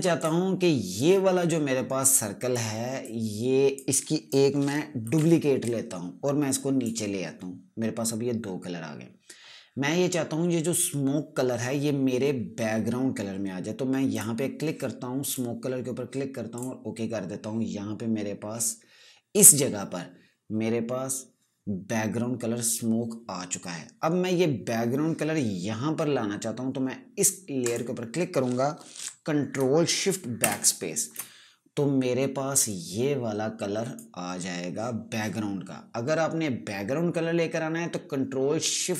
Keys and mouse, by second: 5.6 ctrl+j, 6.2 click, 14.7 click, 28.2 click, 30.9 ctrl+shift+BackSpace, 33.2 click.